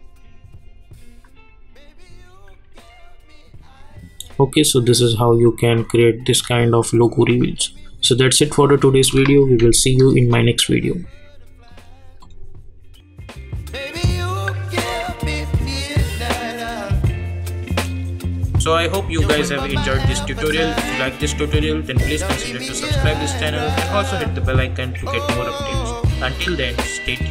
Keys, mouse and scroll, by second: 8.9 space, 9.6 n, 11.6 click.